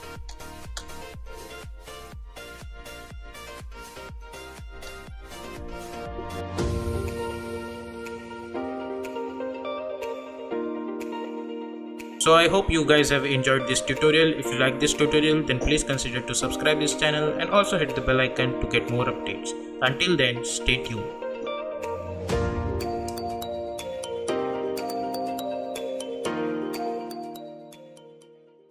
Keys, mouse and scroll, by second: 4.6 space, 5.5 n.